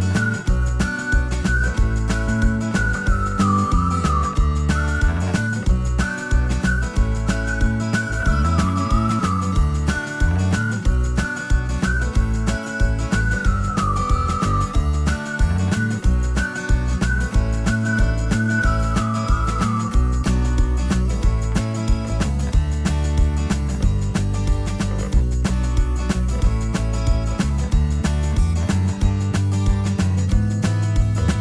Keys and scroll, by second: 0.9 b, 3.5-6.4 typing, 23.0 space, 26.4 ctrl+g, 30.4 m.